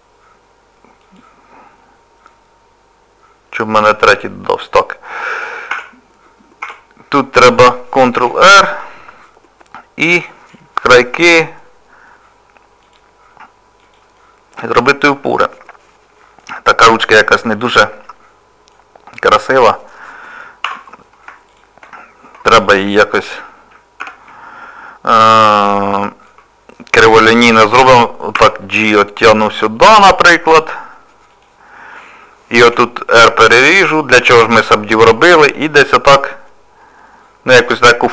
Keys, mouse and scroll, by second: 1.0 click, 3.9 click, 5.1 middle click, 5.7 Tab, 6.6 Tab, 8.1 ctrl+r, 11.1 ctrl+r, 14.2 middle click, 18.0 middle click, 20.7 3, 21.5 shift+click, 24.0 ctrl+KP_Add, 25.4 middle click, 28.3 g, 32.6 ctrl+r, 35.3 g.